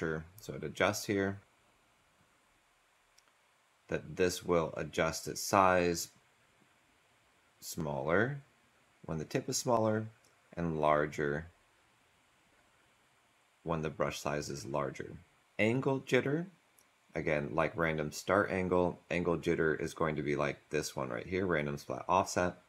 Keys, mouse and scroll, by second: 1.4 Delete, 15.4 Delete.